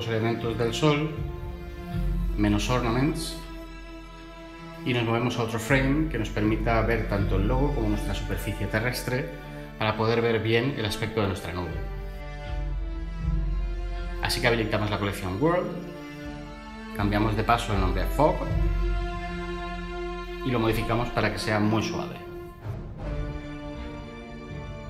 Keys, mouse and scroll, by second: 18.4-18.9 typing, 19.1 Return, 20.6 ctrl+z.